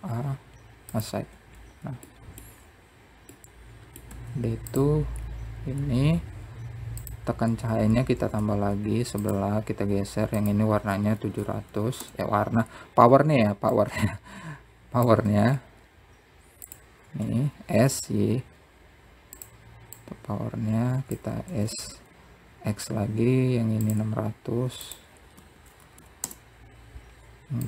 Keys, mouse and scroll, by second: 0.3 click, 0.7 Tab, 1.4 middle click, 1.9-2.7 scroll up 1, 2.7 middle click, 4.5-5.9 scroll up 5, 6.3 click, 7.5 shift+d, 9.0-9.7 scroll down 2, 9.7-11.0 drag, 11.0 KP_0, 13.0 click, 14.6 s, 16.5 s, 19.4 click, 20.8 shift+d, 24.1-25.2 drag, 25.2 KP_0, 27.0 click.